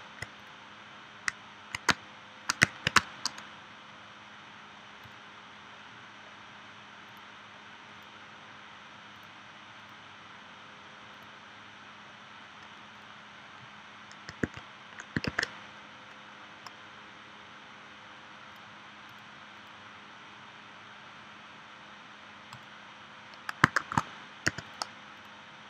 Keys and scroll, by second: 1.9 space, 2.9 space, 14.4 super+z, 15.3 super+z, 23.8 shift+w, 24.5 v.